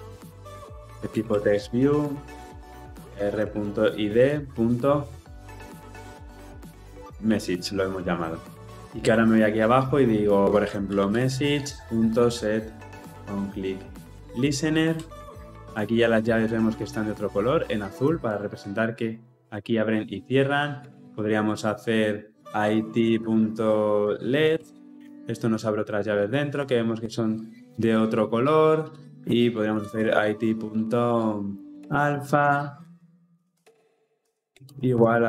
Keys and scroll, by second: 11.5 Return, 24.6 Return.